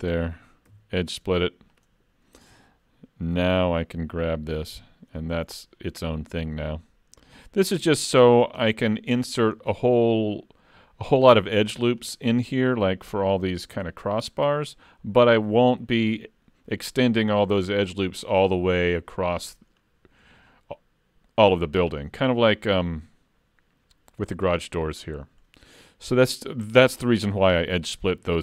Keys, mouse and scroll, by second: 0.7 ctrl+e, 3.4 alt+a, 3.7 3, 4.7 l, 5.2 middle click, 6.1 click, 8.7 middle click, 9.6 shift+middle click, 11.8-12.1 scroll down 3, 12.1 middle click, 14.5 middle click, 18.5-19.6 scroll down 1, 19.6-21.6 scroll down 4, 21.6-22.1 scroll down 2, 22.2 shift+middle click, 24.2-24.6 scroll up 2, 24.9 scroll down 1, 28.1 scroll up 3, 28.3 shift+middle click.